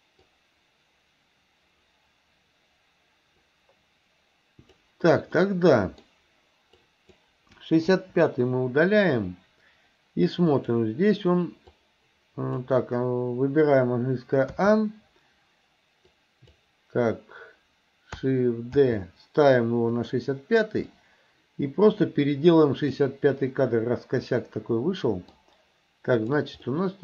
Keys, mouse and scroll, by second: 0.3-4.9 drag, 5.4 middle click, 6.8 click, 8.0 Delete, 10.6 click, 11.7 click, 14.6 a, 16.1-16.6 drag, 18.8 shift+d, 21.0-23.2 drag, 23.4-25.4 middle drag, 26.2 click, 26.7 middle click.